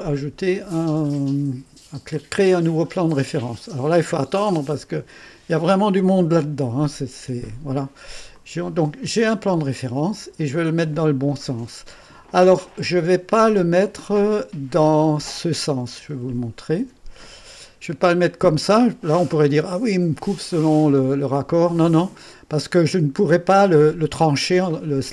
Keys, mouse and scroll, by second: 2.1 click, 8.3-9.7 drag, 9.7 click, 14.8 click, 16.1 9, 16.8 0, 17.2 Return, 18.5-19.8 drag, 18.5 typing, 21.8 click.